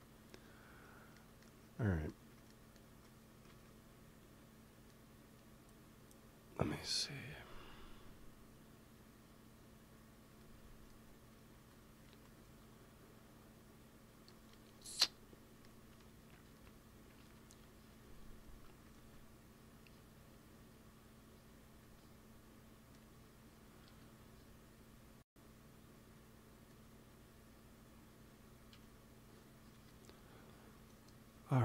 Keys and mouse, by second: 1.0-3.2 middle drag, 3.4 ctrl+s, 11.4-13.2 drag, 12.3 ctrl+s, 17.1 KP_1, 18.8 ctrl+s, 23.8 KP_3, 29.6 KP_3.